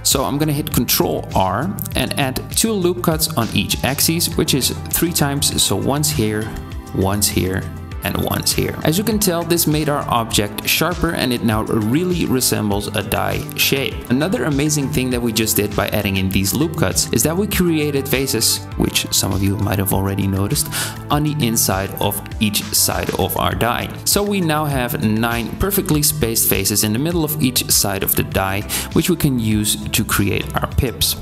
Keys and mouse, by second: 0.0 Tab, 1.9 ctrl+r, 5.8 ctrl+r, 8.8 Tab, 14.4 c, 15.9 3, 17.0 c, 26.3 click, 30.6 middle click.